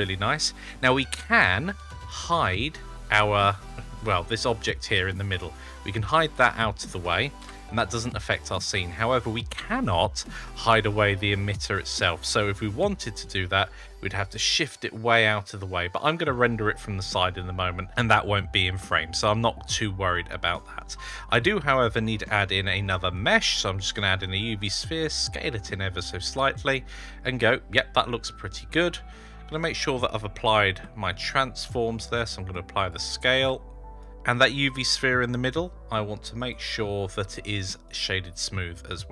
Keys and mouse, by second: 4.8-6.6 middle drag, 7.3 h, 8.6 middle drag, 10.4 click, 13.8 g, 16.2-17.1 middle drag, 19.1-19.7 middle drag, 20.0 shift+middle drag, 20.0-20.6 shift+drag, 21.0 shift+a, 24.6 s, 26.2-27.9 middle drag, 30.4 ctrl+a, 32.4 click, 33.1 ctrl+a, 34.4 click, 34.9 right click, 36.2 click, 37.2 right click, 38.4-39.1 middle drag.